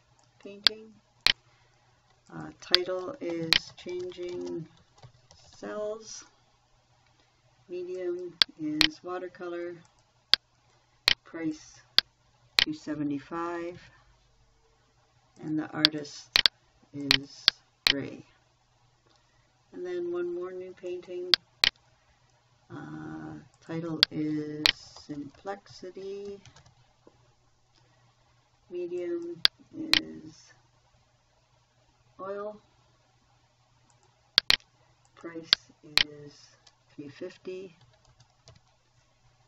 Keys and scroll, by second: 3.6-6.5 typing, 13.1-14.7 typing, 24.9-27.5 typing, 38.0-39.4 typing.